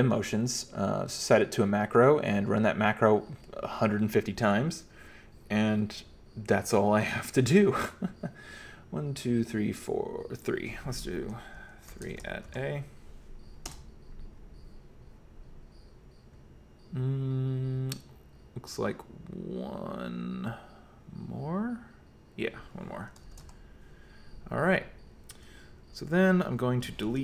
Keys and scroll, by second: 11.7-13.0 typing, 13.7 Return, 23.1-24.0 typing, 25.6-27.2 typing.